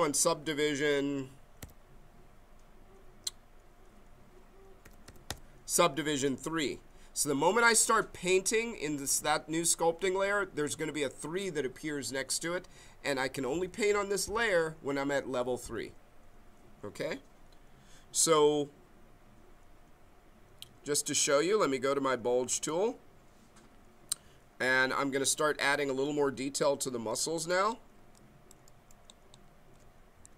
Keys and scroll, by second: 1.6 Page_Down, 4.8 Page_Up, 30.2 b.